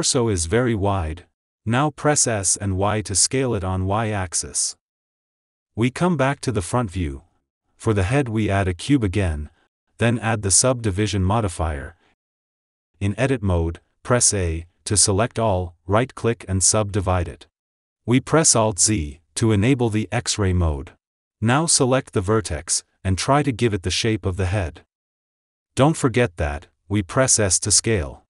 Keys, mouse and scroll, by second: 0.1 click, 1.2 s, 5.6 click, 6.8 ctrl+s, 8.0 shift+a, 12.5 click, 13.5 Tab, 14.1 Tab, 14.3 Tab, 14.9 Tab, 15.8-19.2 right drag, 19.2 alt+z, 19.9 click, 20.6 shift+click, 21.2 shift+click, 22.2 g, 25.0 click, 26.1 g, 27.1 a, 27.3 s.